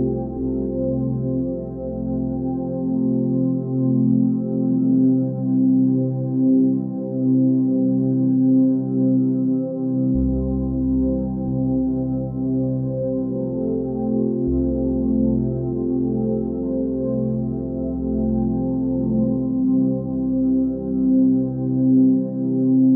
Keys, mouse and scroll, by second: 1.2 space, 1.4 right click, 1.6 click, 1.9 space, 2.2-2.8 ctrl+drag, 3.8 ctrl+l, 5.1-10.5 drag, 11.4-12.0 drag, 15.0 scroll up 1, 15.9-21.3 drag, 22.4 scroll down 1, 22.8 scroll up 1.